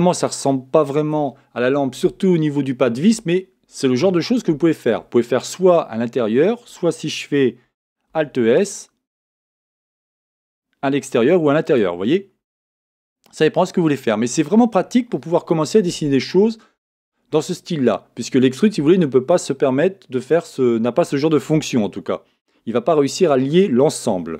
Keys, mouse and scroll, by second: 8.1 alt+s, 12.0-13.8 middle drag.